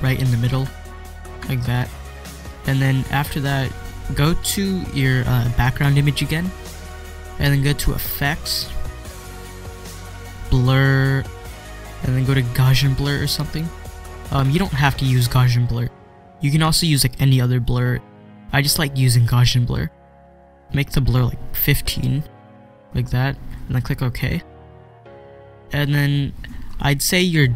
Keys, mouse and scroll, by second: 0.5 click, 0.7 ctrl+scroll down 1, 1.5 ctrl+scroll up 1, 2.4 ctrl+scroll down 1, 6.3 click, 12.5 click, 12.7 click, 15.7-18.2 drag, 19.7-23.5 drag, 24.1 click, 26.6 scroll up 1.